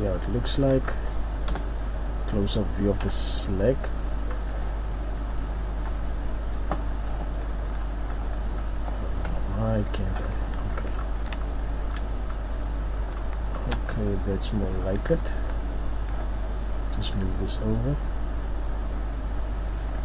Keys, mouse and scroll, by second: 0.8-1.5 scroll up 3, 1.5 KP_0, 2.2-3.0 scroll up 1, 3.0 KP_7, 4.3-4.7 scroll down 3, 4.6 middle click, 5.8 scroll up 1, 6.1 scroll down 1, 6.3 middle click, 6.6 scroll down 1, 7.1 middle click, 7.1 scroll down 2, 7.6-7.9 scroll up 2, 7.9 scroll down 1, 8.1 middle click, 8.1-9.3 scroll up 2, 9.3-10.2 scroll up 1, 9.3 KP_3, 10.2-11.4 scroll up 9, 11.4 shift+scroll down 2, 11.5-11.9 shift+scroll down 2, 11.9-12.3 shift+scroll up 3, 12.7-13.9 scroll up 8, 13.9 scroll down 1, 14.6-15.3 scroll down 4, 15.3 scroll up 1, 15.3 Tab, 17.3 g.